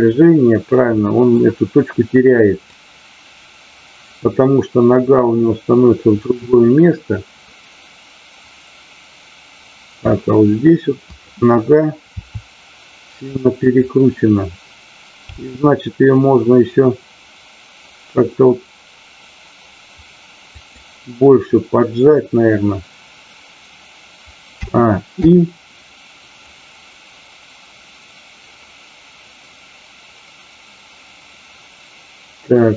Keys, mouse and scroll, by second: 1.1 middle click, 2.7-10.1 drag, 11.0 click, 12.1 r, 13.6 click, 26.4-32.7 drag.